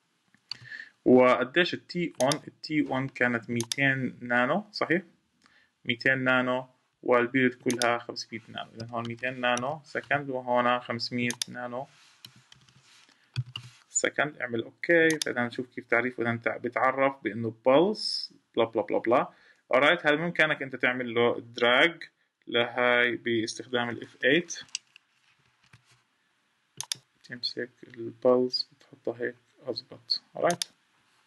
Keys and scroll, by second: 25.2 F8.